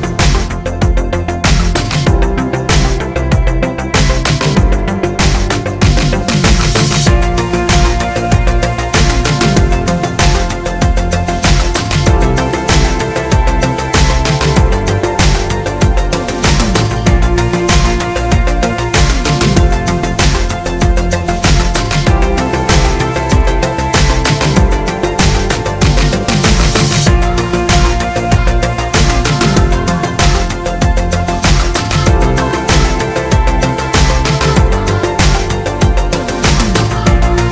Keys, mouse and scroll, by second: 0.0 Tab, 1.1 click, 6.3 Tab, 6.9 shift+middle click, 7.3 click, 7.9-8.7 scroll up 1, 8.7 shift+click, 10.0 middle click, 10.7 shift+d, 10.8 click, 11.3 Tab, 11.3 middle click, 11.7 click, 12.0 Tab, 12.2 a, 15.0-17.4 shift+middle drag, 15.3 g, 17.4 click, 19.1 2, 19.2 click, 19.6 g, 20.2-22.5 middle drag, 21.5 g, 22.5 click, 23.4 g, 23.9 click, 24.0 middle click, 24.1 Tab, 24.2 scroll down 2, 24.4 click, 24.6-27.0 middle drag, 25.0 click, 25.2 Tab, 25.5 alt+click, 25.8 shift+click, 26.3 shift+d, 26.7 Return, 27.0 Tab, 27.5 shift+middle click, 27.9 shift+click, 28.2 click, 29.1 click, 29.9 shift+click, 30.4 ctrl+j, 31.5 Tab, 31.8 a, 32.3 1, 32.4 click, 33.5-34.6 drag, 34.4 z, 35.2 z, 35.5 ctrl+a.